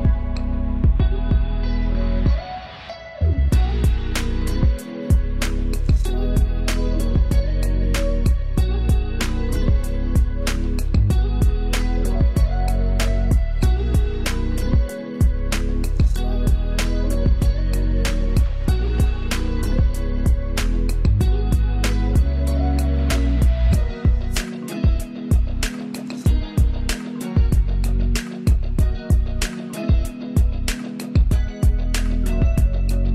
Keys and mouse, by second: 0.0 =, 3.0 =, 3.6 click, 4.2 =, 5.5 ctrl+click, 5.7 ctrl+space, 8.3-23.0 drag, 23.8 ctrl+z, 24.6-28.8 alt+drag, 28.8 right click, 30.6 click.